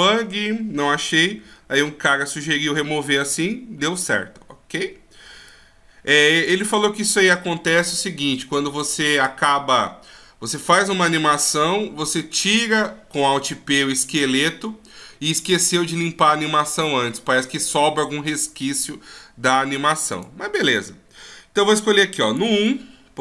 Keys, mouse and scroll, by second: 5.6 click, 19.0-19.6 scroll down 1, 19.6 scroll down 1, 20.3 click, 22.4 click, 22.8 click.